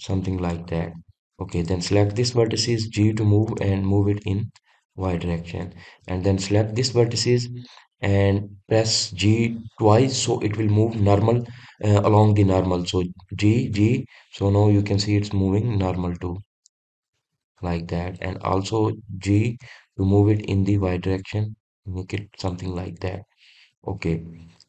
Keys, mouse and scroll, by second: 1.6 click, 2.3 click, 3.8 g, 6.0 click, 7.4 click, 18.2 click, 19.0 click, 20.3 g, 23.2 click, 24.0-24.6 middle drag.